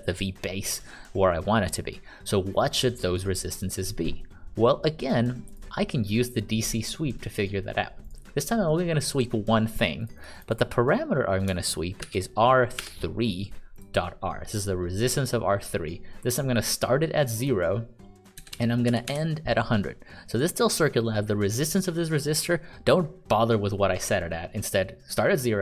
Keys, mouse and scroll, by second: 1.7 click, 12.0 shift+r, 12.7 3, 13.7 click, 18.3-19.5 typing.